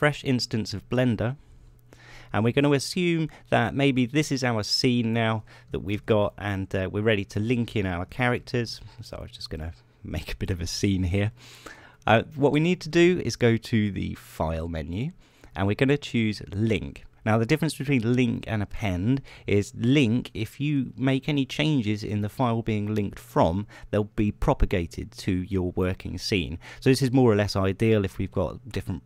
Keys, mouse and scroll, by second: 0.4 click, 2.9 click, 4.7-5.8 drag, 6.4 shift+d, 6.7 shift+right click, 7.2-9.1 shift+drag, 9.1 shift+d, 9.6 shift+right click, 10.1-11.2 drag, 11.9 middle click, 13.0 shift+click, 15.5 click.